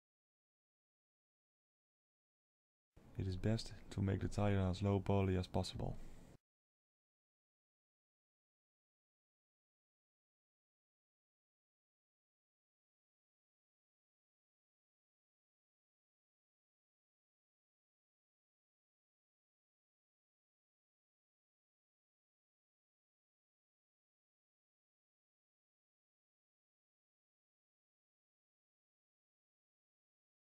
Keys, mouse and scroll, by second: 3.9 click, 4.4 middle click, 5.7 shift+click, 6.0 shift+middle click, 7.3 i, 13.8 middle click, 15.8 ctrl+r, 17.9 alt+a, 19.5 Tab, 21.8 click, 23.9-24.8 scroll down 1, 24.8-25.9 scroll down 6, 25.9 Tab, 26.7 click, 27.7 3, 27.8 click, 28.5 middle click, 29.4 shift+click.